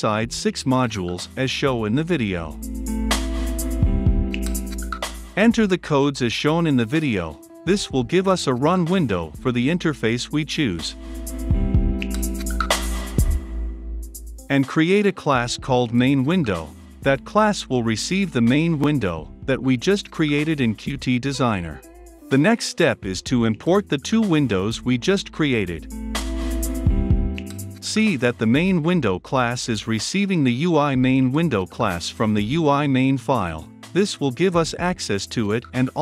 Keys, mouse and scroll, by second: 0.2 ctrl+v, 1.0-2.7 drag, 2.7 Return, 2.8 Up, 2.8-4.3 typing, 4.2 click, 4.7 Return, 6.5 click, 6.8 Return, 7.3 ctrl+v, 8.4-12.3 drag, 12.1-13.9 typing, 13.1 click, 13.4 Left, 13.6 Return, 13.8 Right, 14.5 click, 14.9 ctrl+v, 16.0 click, 16.6 Return, 17.6 s, 17.9 l, 19.6-27.6 typing, 20.6 Down, 20.9 Return, 21.4 click, 21.5 Return, 27.3-36.0 drag.